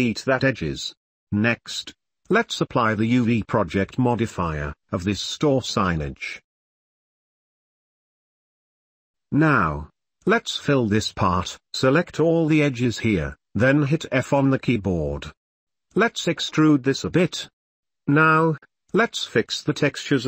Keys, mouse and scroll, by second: 1.3 middle click, 1.6 click, 2.4 shift+middle click, 2.7 shift+middle click, 3.6 click, 4.5-4.8 shift+middle drag, 5.2-5.6 middle drag, 6.5-7.3 middle drag, 8.4-9.4 middle drag, 9.6 middle click, 9.8 click, 11.8 Tab, 12.1 click, 13.5 shift+click, 14.5 f, 15.1 middle drag, 15.2 3, 16.1 e, 18.0 3, 18.1 middle click, 19.4-20.2 middle drag.